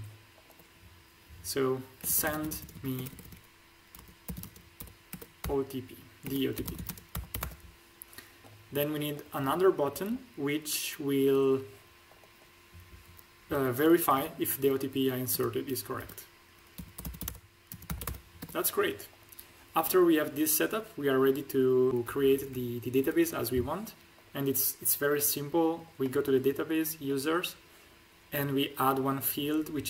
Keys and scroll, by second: 2.0-2.9 typing, 3.9-7.2 typing, 8.5 p, 15.9-18.0 typing, 22.0 Up.